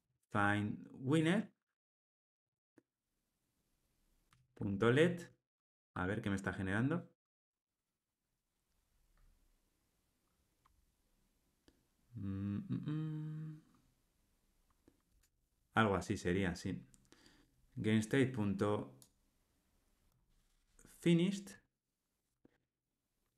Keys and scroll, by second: 15.1 Tab, 22.5 Escape.